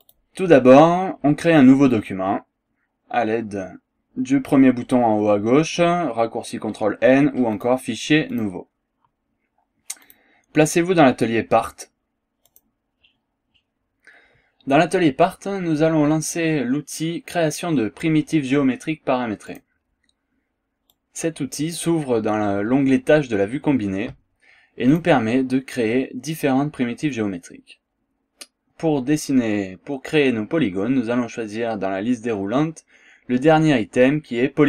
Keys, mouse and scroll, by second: 0.1 click, 7.6 click, 8.3 click, 10.1 click, 12.5 click, 19.5 click, 20.9 click, 24.9 click.